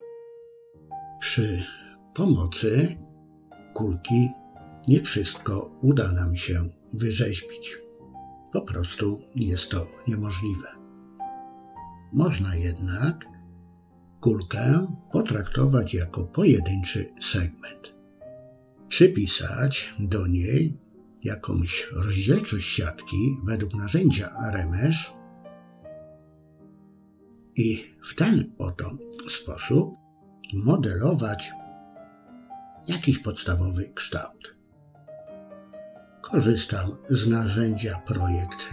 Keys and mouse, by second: 4.0 f, 5.9 click, 6.9 click, 7.6 middle click, 8.5 KP_3, 10.2 click, 11.0 click, 12.5 click, 13.9 click, 15.0 click, 16.9-25.4 drag, 25.6 middle click, 26.5 shift+click, 26.8 shift+click, 27.9 middle click, 28.4 shift+click, 29.5 KP_3, 30.5 shift+middle click, 34.3 click, 35.3 middle click, 36.1 KP_1, 37.1 shift+middle click.